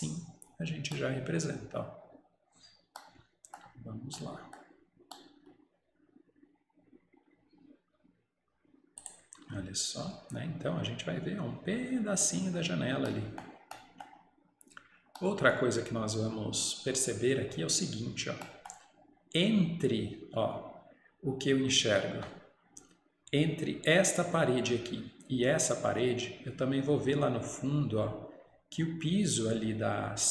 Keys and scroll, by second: 9.5 Escape.